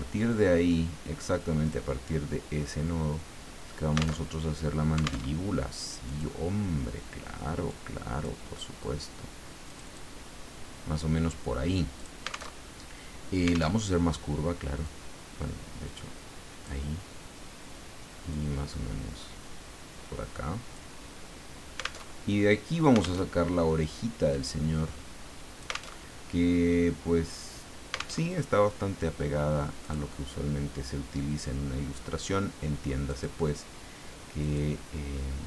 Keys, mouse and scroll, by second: 1.6 click, 4.2 alt+Tab, 5.2 alt+Tab, 6.1 click, 7.9 click, 9.7 click, 12.0 click, 12.6 alt+Tab, 13.7 alt+Tab, 14.8-16.9 drag, 18.3-21.1 drag, 22.0 alt+Tab, 23.2 alt+Tab, 24.3-25.9 drag, 25.9 alt+Tab, 28.2 alt+Tab, 29.8 click, 33.1 click, 34.4 click.